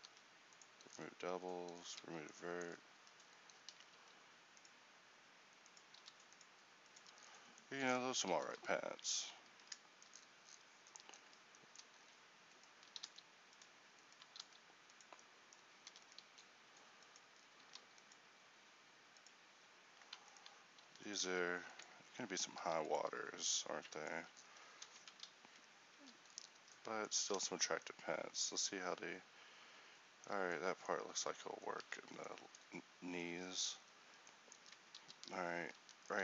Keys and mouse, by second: 0.2 w, 1.2 z, 2.1 Tab, 3.1 Tab, 4.1 ctrl+r, 7.0 Tab, 7.4 middle click, 7.9 middle click, 9.6 Tab, 13.2 s, 14.5 s, 16.0 e, 16.4 s, 17.7 ctrl+r, 20.9 e, 21.3 s, 22.7 ctrl+r, 24.2 Tab, 26.0 a, 27.2 Tab, 31.2 Tab, 31.9 Tab, 35.0 ctrl+r.